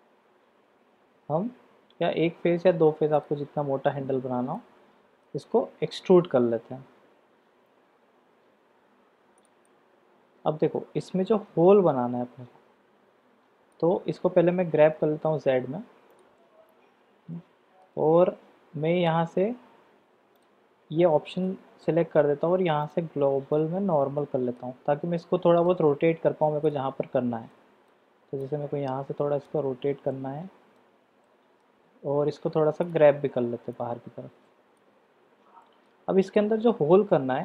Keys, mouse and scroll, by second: 3.1 shift+click, 4.5-9.5 middle drag, 9.7-13.7 middle drag, 16.3-17.8 middle drag, 20.4 click, 21.4 middle click, 22.8-23.8 drag, 24.2 middle click, 25.2 middle click, 26.7 click, 27.5 middle click, 28.4-29.5 drag, 30.1 middle click, 31.2 middle click, 33.8-34.9 drag, 35.3 Tab, 35.6 middle drag, 36.3-37.4 middle drag.